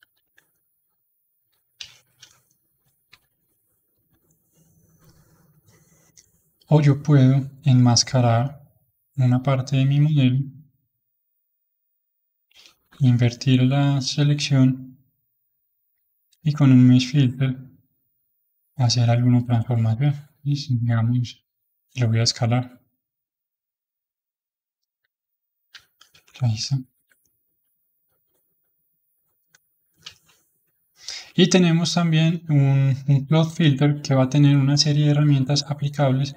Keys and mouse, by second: 0.0 ctrl+z, 0.5-2.0 middle drag, 2.0 ctrl+shift+z, 2.5-3.8 middle drag, 3.8 h, 6.8-7.9 drag, 7.9-9.2 middle drag, 9.2-12.4 drag, 12.7 ctrl+i, 13.8-16.3 middle drag, 16.3-20.6 drag, 22.5 click, 23.9-24.9 middle drag, 24.9 click, 26.8 alt+m, 27.2-32.7 middle drag.